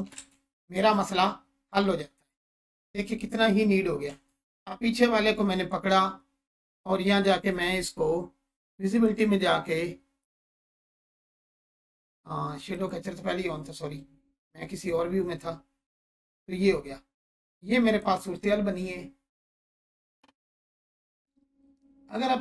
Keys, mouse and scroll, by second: 0.1 ctrl+space, 1.4-1.7 scroll down 1, 2.7 space, 4.5 click, 10.5-18.1 drag.